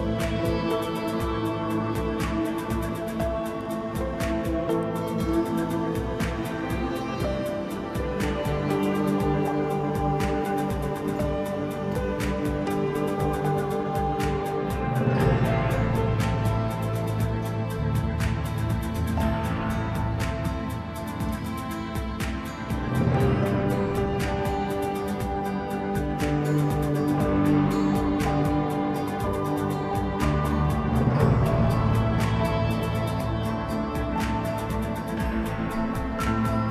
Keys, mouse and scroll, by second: 0.7 Tab, 1.0 Tab, 1.6 s, 3.4-3.8 middle drag, 3.8 scroll up 1, 4.0 Tab, 4.5 middle click, 4.9-5.3 scroll up 1, 5.4 2, 6.0 click, 6.1 click, 7.4 click, 7.6 click, 8.4 f, 9.2 3, 10.5 ctrl+b, 13.9-15.5 middle drag, 15.5-16.6 drag, 16.6-17.7 middle drag, 17.7-18.2 drag, 18.2-18.9 middle drag, 18.9 click, 19.3 middle click, 19.7-20.4 scroll up 3, 20.4 x, 23.4 2, 24.1 click, 25.4-27.1 drag, 27.1 scroll down 3, 27.4-28.6 middle drag, 28.6 KP_1, 29.3 Tab, 29.7-30.5 scroll up 2, 30.5 right click, 31.3-31.7 scroll down 2, 31.7 s, 33.4-34.4 middle drag, 34.4 Tab, 35.1 KP_1, 35.9-36.7 scroll up 1.